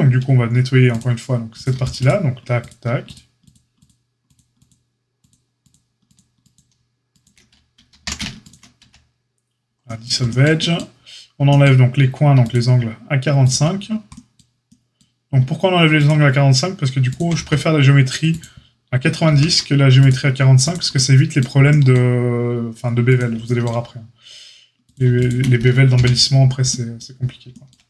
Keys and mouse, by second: 0.9-1.6 drag, 0.9-1.6 middle drag, 1.9 alt+shift+click, 1.9 alt+shift+middle click, 3.7 alt+shift+click, 3.7 alt+shift+middle click, 4.5 alt+shift+click, 6.0 alt+shift+click, 7.9 ctrl+z, 8.4 click, 8.8 x, 13.4 shift+click, 16.0 shift+click, 17.0 shift+click, 17.3 x, 19.2 ctrl+r, 23.0-24.9 shift+drag, 25.1 shift+click, 25.9 j.